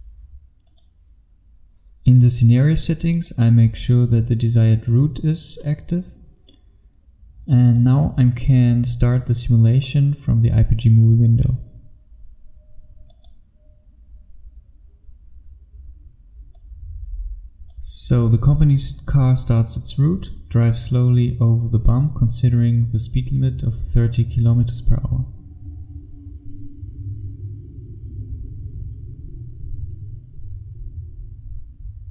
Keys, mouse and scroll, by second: 0.7 click, 29.3-32.1 scroll down 1.